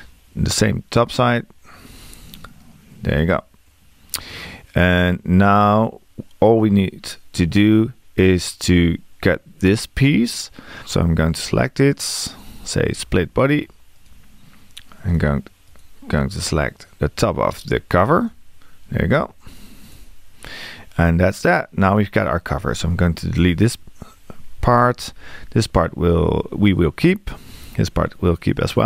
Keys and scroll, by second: 23.4 BackSpace.